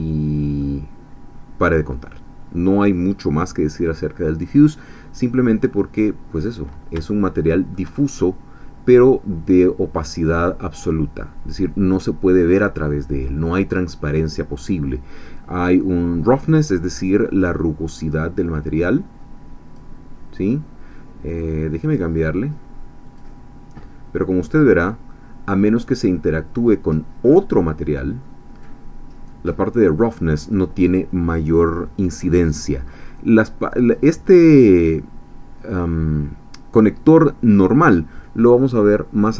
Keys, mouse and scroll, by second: 0.6-2.8 middle drag, 5.7-6.0 scroll up 1, 6.2 scroll down 1, 7.0-7.9 shift+middle drag, 8.0-14.3 shift+middle drag, 18.0-19.9 drag, 21.7 click, 23.1 click, 24.6 click, 26.8 scroll up 2, 27.8 click, 30.0-39.3 drag.